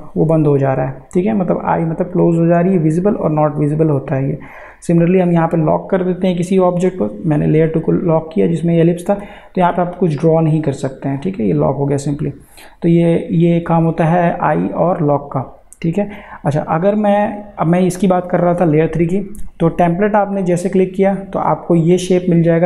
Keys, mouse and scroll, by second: 0.9 click, 9.2 click, 15.3 click.